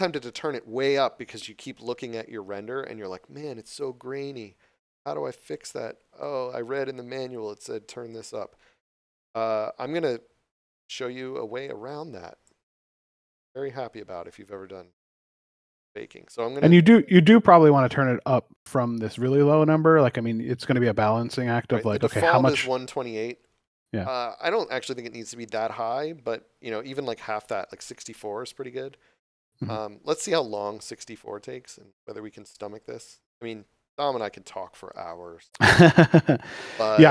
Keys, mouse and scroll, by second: 4.3 scroll up 1, 5.4 click, 13.3 scroll down 1, 15.3 click, 22.5 Return, 24.5 click, 28.0 click, 30.4 click.